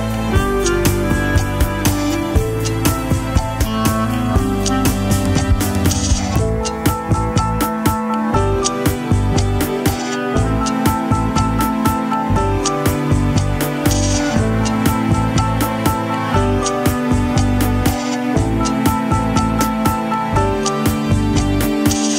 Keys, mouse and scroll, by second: 11.3-11.9 typing, 11.4 right click, 12.7 right click, 14.5 scroll up 1, 16.4 w, 16.8 alt+right click, 18.2 alt+click, 19.9 alt+middle click, 21.0 alt+click, 21.9 alt+middle click.